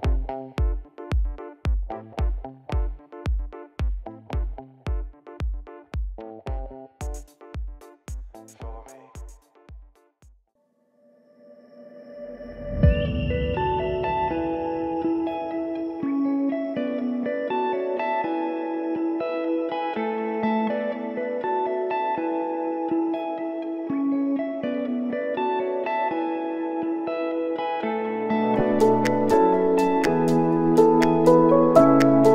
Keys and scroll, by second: 1.9 ctrl+s, 5.4 ctrl+s, 13.2 s, 14.4 shift+p, 16.5 shift+r, 27.0 ctrl+s.